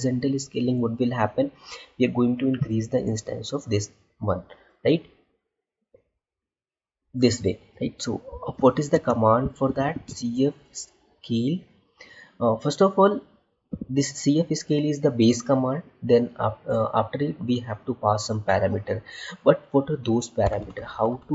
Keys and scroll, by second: 8.8 space.